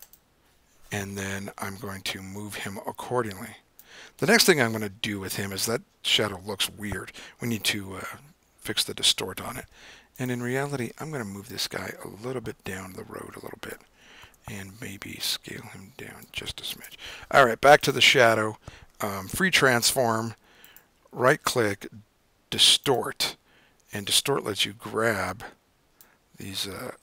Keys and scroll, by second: 0.5 Return, 14.6 super+t, 16.8 Return, 19.4 super+t.